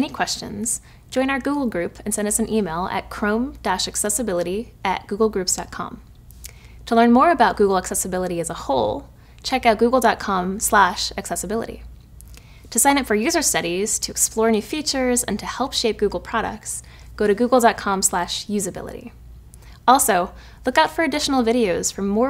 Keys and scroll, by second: 2.9 typing.